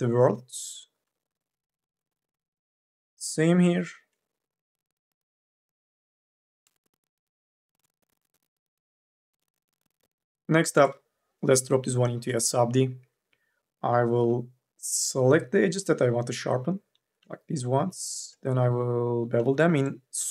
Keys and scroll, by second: 4.6 2, 13.1 q, 13.9 u, 14.4 l.